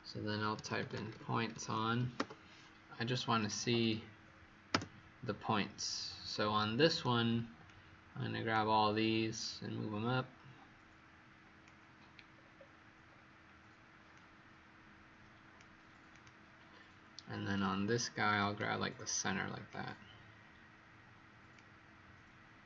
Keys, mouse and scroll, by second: 0.5-2.1 typing, 2.1 Return, 3.3 click, 3.7 click, 4.6 Return, 6.2 right click, 7.6 click, 12.2-13.0 scroll down 3, 13.0-14.0 scroll up 1, 14.0 scroll up 1, 14.0 click.